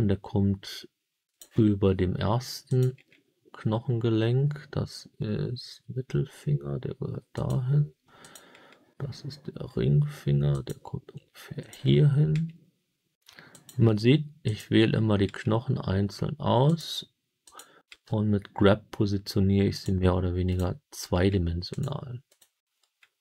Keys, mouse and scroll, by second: 1.2 click, 2.6 click, 5.7 g, 7.3 click, 8.1 click, 10.4 click, 10.4 g, 11.5 click, 12.2 g, 13.4 click, 14.4 click, 15.2 g, 16.6 click, 17.4 click, 17.8 g, 19.6 click, 20.4 click, 21.0 g, 21.6 click, 22.2 click, 22.7 g.